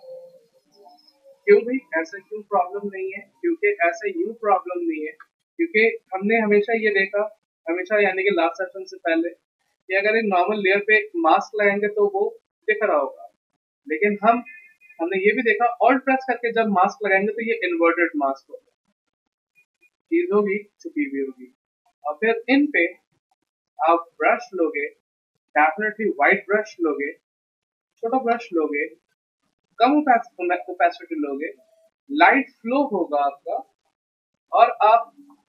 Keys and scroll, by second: 0.0 ctrl+d, 1.4 v, 14.9 ctrl+z.